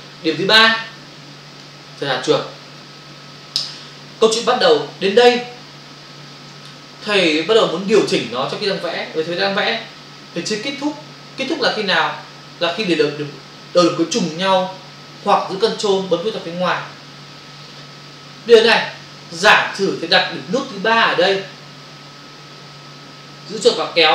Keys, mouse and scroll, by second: 0.5 click, 23.5 click.